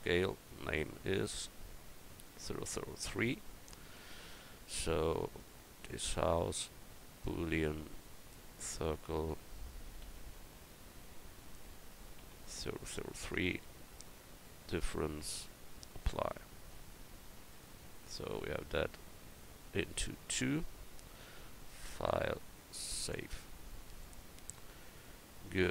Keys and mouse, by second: 4.1-5.2 middle drag, 5.2-6.4 right drag, 7.0-12.4 drag.